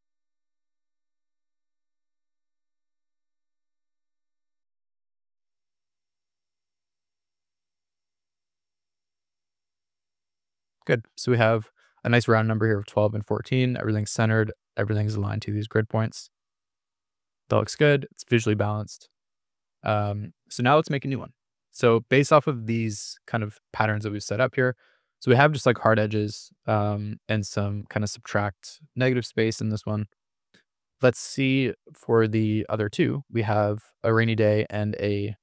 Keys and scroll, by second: 8.9 Escape, 16.4 super+-, 22.6 super+=, 29.9 super+-.